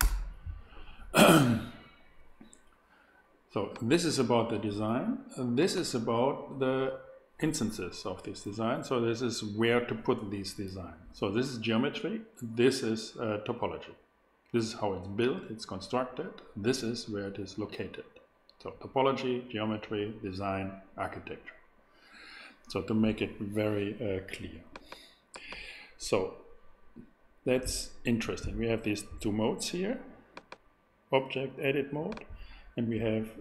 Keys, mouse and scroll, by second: 0.0 Return, 3.7-5.5 drag, 5.9-8.3 drag, 24.7 click.